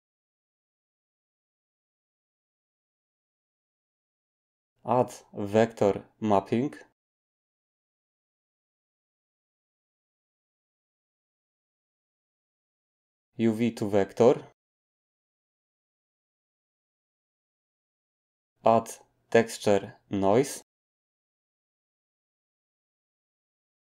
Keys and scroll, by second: 2.0 g, 5.1 a, 18.7 a.